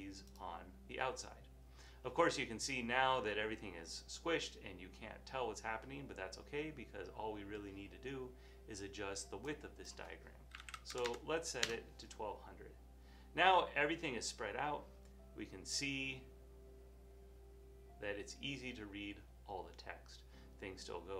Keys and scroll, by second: 10.4-11.9 typing.